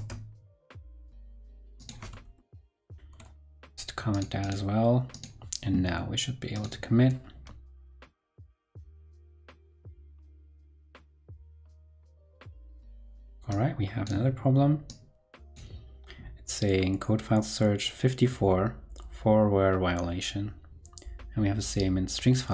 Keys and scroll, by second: 2.3 ctrl+Right, 2.8 ctrl+Right.